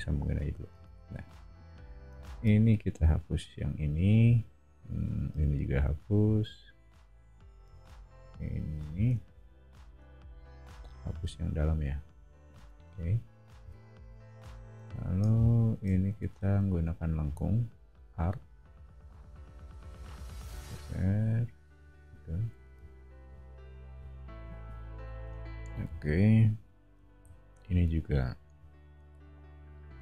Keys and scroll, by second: 0.7 space, 1.1 e, 8.9 o, 10.8 e, 13.6 o, 16.1 a, 22.5 e, 25.1 o, 27.5 a.